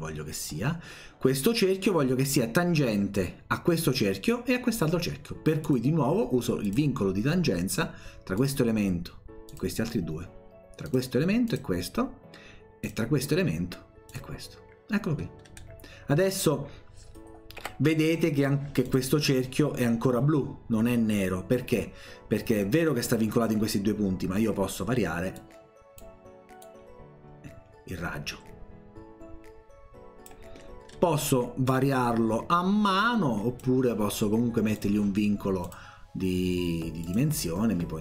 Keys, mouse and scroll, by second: 5.6 click, 6.6 click, 8.4 click, 9.5 click, 10.9 click, 11.5 click, 12.9 click, 14.1 click, 15.4 middle click, 17.6 Escape, 18.9 click, 25.4 click, 26.6-30.3 drag, 30.9-31.3 scroll down 1, 31.9-33.6 drag, 34.8 click, 35.6 click, 37.1 click.